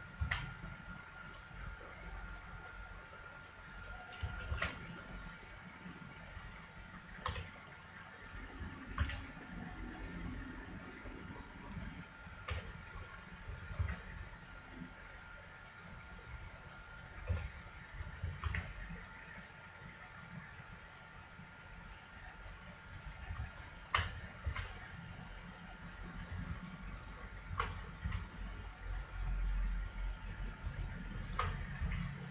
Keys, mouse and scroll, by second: 0.2 s, 3.0-5.1 drag, 4.5 shift+s, 7.2 b, 9.0 s, 11.4 click, 12.4 b, 13.8 s, 17.3 b, 18.4 s, 23.5-25.0 drag, 24.4 s, 25.0 right click, 25.2-27.2 middle drag, 27.2-28.9 right drag, 28.0 s, 31.0-32.3 right drag, 31.8 s.